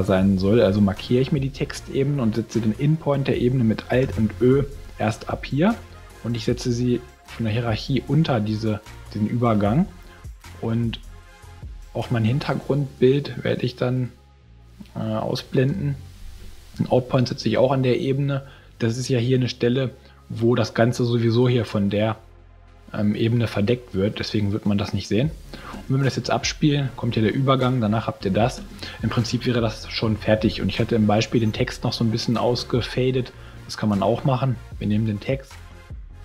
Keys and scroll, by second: 4.0 alt+ö, 15.6 alt+ä, 25.7 space, 28.5 space.